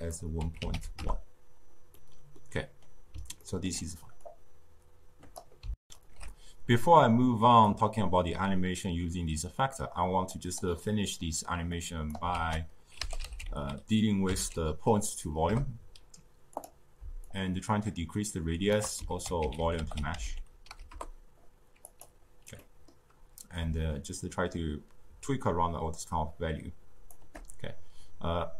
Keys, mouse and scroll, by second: 1.9-4.2 middle drag, 4.2-5.7 drag, 5.7 ctrl+alt+shift+q, 7.6-10.7 drag, 10.7-11.7 middle drag, 11.7 click, 12.2 ctrl+a, 17.2-19.0 shift+drag, 19.0 ctrl+a, 22.5-23.7 middle drag, 24.0-27.0 shift+drag.